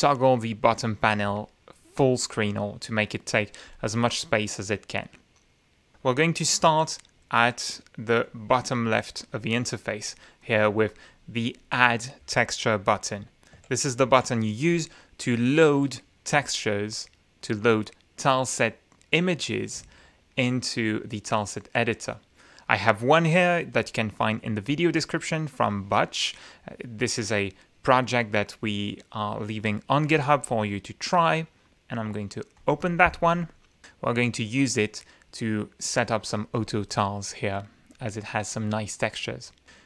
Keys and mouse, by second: 6.6 F9, 8.2-9.4 drag, 10.4 click, 11.1 click, 13.5 shift+F9, 15.6 click, 18.2 click, 19.1 click, 32.5 click.